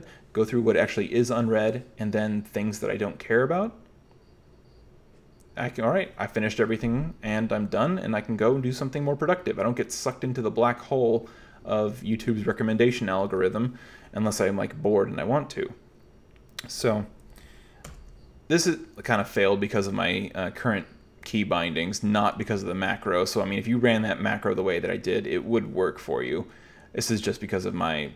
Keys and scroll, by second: 17.9 super+8, 19.0 j, 20.0 j, 21.7-25.6 typing.